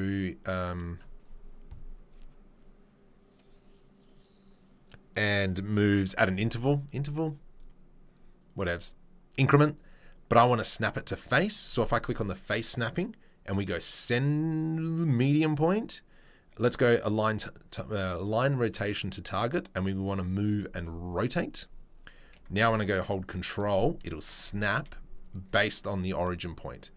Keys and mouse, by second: 20.6 shift+click, 22.2 g, 24.2-26.9 middle drag, 24.7 s.